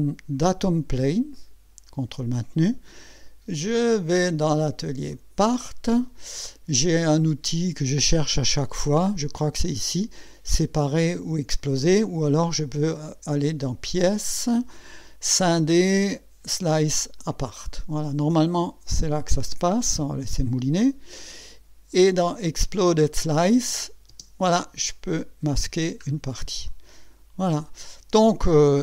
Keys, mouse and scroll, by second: 1.3 ctrl+click, 3.7 click, 5.1 click, 9.3 click, 11.1 click, 14.2 click, 17.2 click, 22.3 click, 23.6 click, 24.1 space, 24.9-25.8 drag, 26.0 scroll up 1, 26.7-27.9 drag.